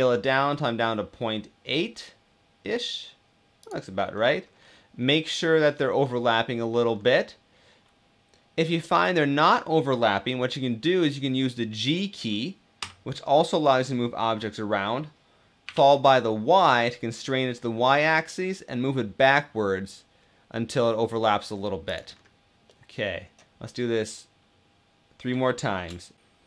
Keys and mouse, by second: 3.9 middle click, 12.5 g, 15.4 y, 22.4 middle click, 26.0 shift+d, 26.2-26.4 middle drag.